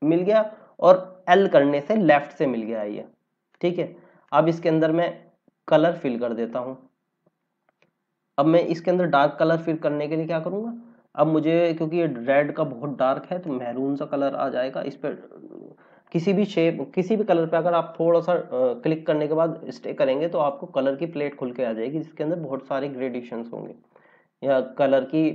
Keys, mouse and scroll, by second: 1.5 l, 3.4 click, 4.9-5.8 scroll down 1, 13.4 click.